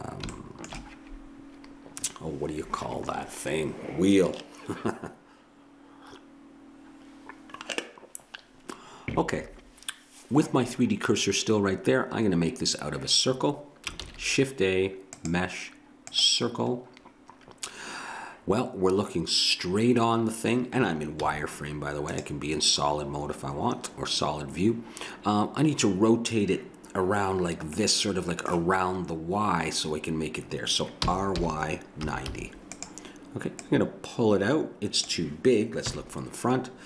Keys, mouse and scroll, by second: 14.0 shift+a, 21.1 z, 27.8-30.1 middle drag, 31.0 r, 33.6-35.4 drag, 35.8 KP_1.